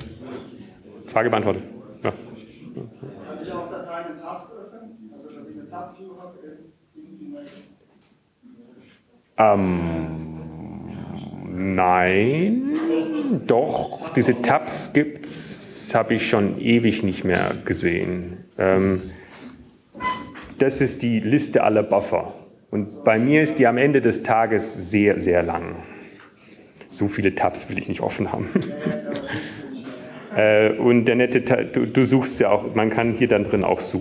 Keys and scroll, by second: 1.9 Up, 2.0-2.5 typing, 23.4 alt+shift++.